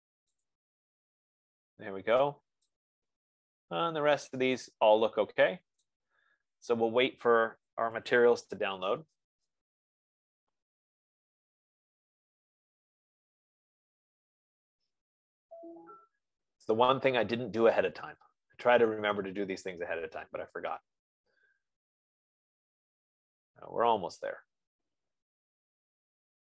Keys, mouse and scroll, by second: 0.8 click, 6.0-11.2 drag.